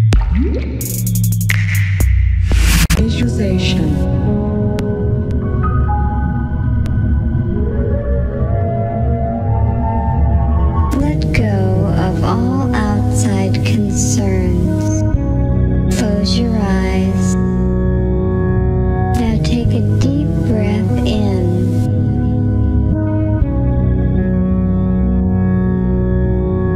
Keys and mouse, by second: 1.8 z, 3.0 middle click, 3.1 g, 3.5 middle click, 4.0 a, 6.1 a, 6.5 a, 6.7 ctrl+x, 7.4 alt+g, 7.6 z, 9.3-17.3 middle drag.